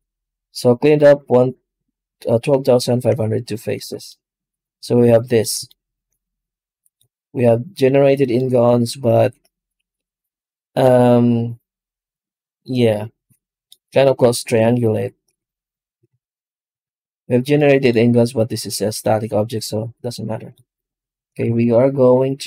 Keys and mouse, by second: 3.6 alt+a, 3.9-5.4 middle drag, 5.5-7.0 shift+middle drag, 8.3-14.4 middle drag, 14.4 ctrl+a, 15.9 alt+a, 16.7 ctrl+z, 21.4 ctrl+space.